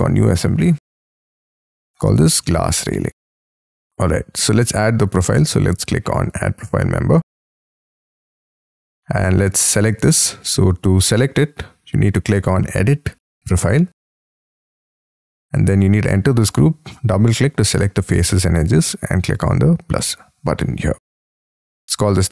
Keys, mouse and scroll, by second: 2.2-4.0 typing, 8.0-9.2 scroll up 13, 15.4 double click, 16.3 double click, 21.8-22.3 typing.